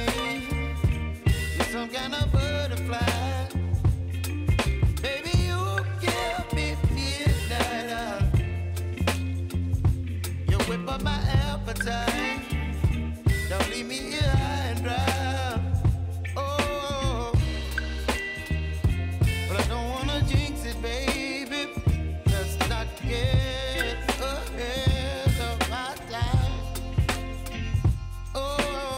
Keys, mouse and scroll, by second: 1.2 space, 2.5 click, 6.5 click, 7.5 s, 8.1-10.2 drag, 10.4 space.